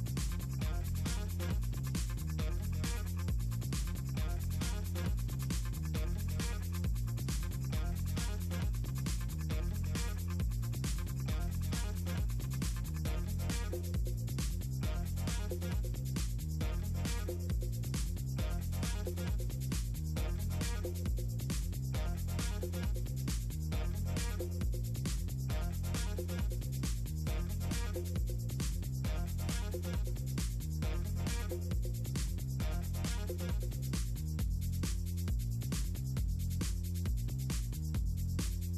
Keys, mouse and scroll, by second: 0.0-0.2 typing, 0.3 ctrl+scroll down 2, 0.5 click, 0.7 click, 0.9 click, 1.1 click, 1.9 ctrl+click, 3.1 middle click, 3.3 middle click, 3.4 middle click, 3.5 ctrl+scroll down 2, 4.2 ctrl+scroll down 2, 4.8 middle click, 5.4 click, 6.3 middle click, 6.6 click, 8.1 click, 9.2 click, 9.5 ctrl+click, 10.0 click, 11.1 click, 11.4 middle click, 11.7 middle click, 11.8 shift+click, 11.9 click, 12.0 middle click, 12.4 click, 12.7 middle click, 13.2 click, 13.5 ctrl+click, 13.7 ctrl+click, 13.9 ctrl+click, 14.3 click, 15.0 click, 15.4 middle drag, 15.6 middle click, 16.0 middle click, 16.9 click, 17.7 click, 18.4 ctrl+click, 19.4 middle click, 19.5 click, 19.6 click, 19.9 click, 22.1 click, 22.9 middle click, 24.3 drag, 25.6 click, 26.2 click, 26.9 click, 27.6 shift+Up, 28.0 middle click, 28.2 drag, 29.3 click, 31.1 click, 32.0 e, 32.6 click, 33.0 middle click, 33.5 middle click, 33.9 click, 34.4 middle click, 34.7 click, 34.9 middle click, 35.1 click, 36.4 click, 36.7 click, 36.9 click, 37.2 click.